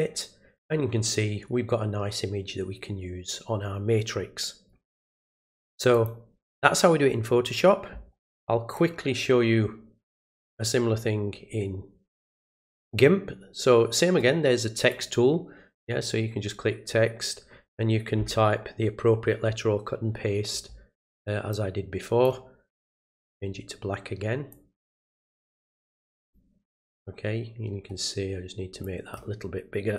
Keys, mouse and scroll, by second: 5.9 click, 8.7-10.0 drag, 14.9 click, 15.7 click, 21.5 click, 23.0 click, 24.5 click, 26.2 click, 28.8 click.